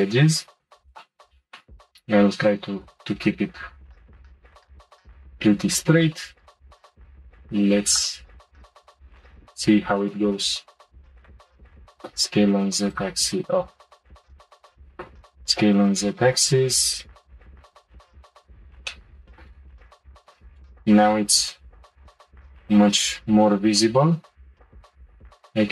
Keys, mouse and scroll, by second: 0.8 click, 7.9-10.9 drag, 11.3 click, 11.6 click, 11.8 s, 13.9 shift+click, 14.6 shift+click, 14.8 s, 18.1 click, 18.9 shift+middle click, 19.8 click, 20.6 shift+click, 21.4 c, 24.8 g.